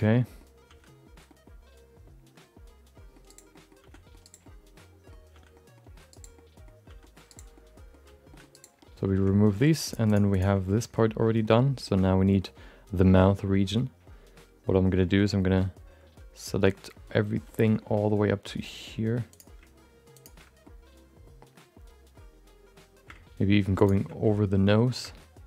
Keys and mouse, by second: 0.2 middle click, 0.6 c, 3.5 middle click, 3.8 c, 4.4 middle click, 5.3 c, 6.3 middle click, 6.8 c, 7.5 middle click, 8.0 c, 8.8 middle click, 10.1 click, 10.6 middle click, 11.4 middle click, 11.8 middle click, 12.0 middle click, 12.9 middle click, 14.7 middle click, 15.0 shift+middle click, 15.2 middle click, 17.1 middle click, 17.6 shift+middle click, 17.8 middle click, 18.6 middle click, 19.3 shift+click, 20.1 ctrl+shift+click, 20.8 middle click, 23.8 ctrl+shift+click, 24.3 middle click.